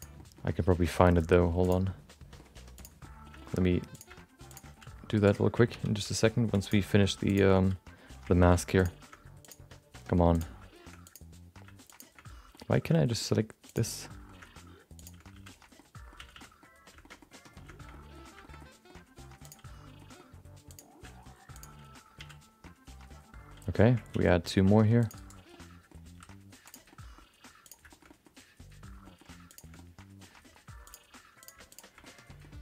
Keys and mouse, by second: 0.1 middle click, 0.4 g, 2.0 middle click, 2.8 click, 3.0 middle click, 3.4 shift+middle click, 3.5 middle click, 3.9 click, 4.5 click, 4.7 f, 5.1 right click, 6.0 ctrl+z, 6.6 click, 7.2 shift+click, 7.5 f, 8.4 ctrl+z, 8.8 click, 9.4 shift+click, 10.3 click, 11.0 click, 11.9 shift+click, 12.5 middle click, 12.9 shift+middle click, 13.1 middle click, 13.7 click, 14.0 middle click, 15.0 shift+click, 15.3 f, 15.7 middle click, 16.3 a, 16.3 middle click, 17.0 shift+middle click, 17.2 middle click, 17.9 middle click, 18.4 shift+middle click, 18.6 middle click, 19.4 click, 20.0 middle click, 20.7 click, 21.5 shift+click, 22.1 f, 22.6 middle click, 24.1 ctrl+r, 25.6 middle click, 26.6 s, 26.9 middle click, 27.6 click, 27.9 shift+middle click, 28.0 middle click, 29.0 middle click, 29.5 click, 29.7 middle click, 30.3 g, 31.4 click, 31.7 shift+click, 32.0 middle click, 32.5 g.